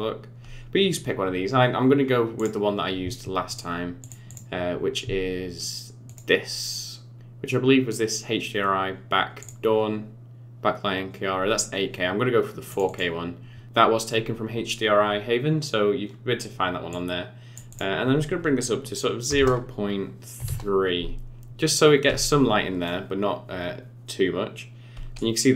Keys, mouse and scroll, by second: 3.4 click, 4.0 click, 4.2 click, 16.9 click, 17.7 click, 22.8 middle click.